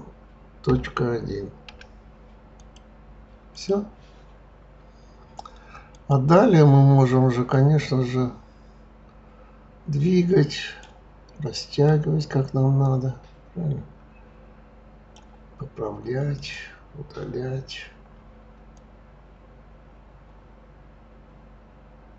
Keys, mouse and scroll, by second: 3.5 click, 5.9 click, 7.5 click, 11.7 click, 12.8 click, 16.4 click, 18.7 click.